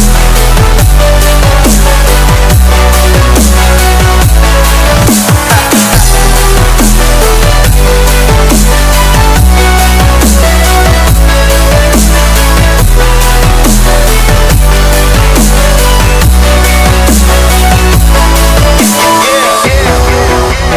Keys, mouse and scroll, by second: 0.2 Caps_Lock, 0.3 l, 1.6 a, 3.4 r, 6.0 e, 6.3 space, 7.6 space, 10.6 shift+7, 11.3 space, 13.9 g, 15.0 BackSpace, 15.4 Caps_Lock, 15.5 g, 16.4 Caps_Lock, 16.7 r, 17.3 r, 18.4 e, 20.2 y.